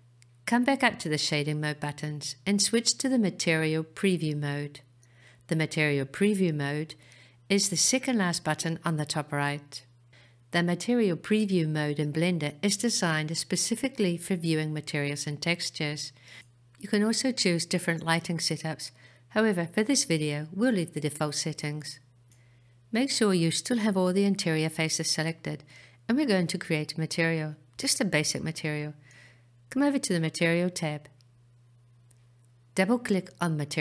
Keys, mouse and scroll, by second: 5.4 click, 12.9-16.7 middle drag, 28.2 click, 32.5 click.